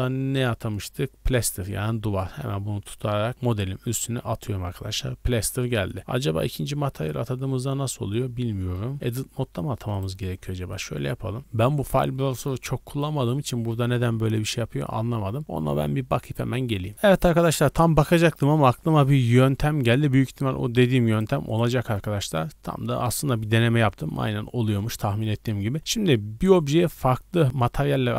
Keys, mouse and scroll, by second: 0.7 click, 2.2 click, 6.4 click, 9.3 middle drag, 9.9 right click, 10.3 Tab, 10.7 right click, 19.6 Tab, 21.1 right click, 21.5 right click.